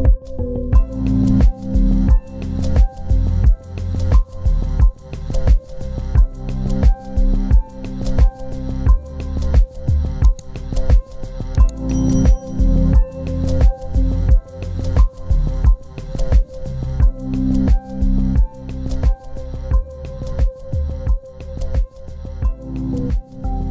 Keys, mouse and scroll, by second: 0.7 shift+click, 1.7 t, 2.7 double click, 5.2 right click, 10.8 typing, 11.6 double click, 14.3 typing, 16.7-18.1 typing.